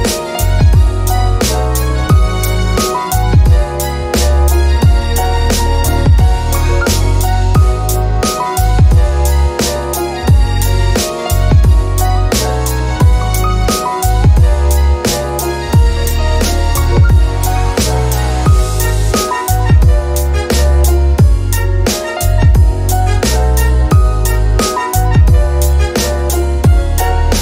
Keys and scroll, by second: 1.1 a.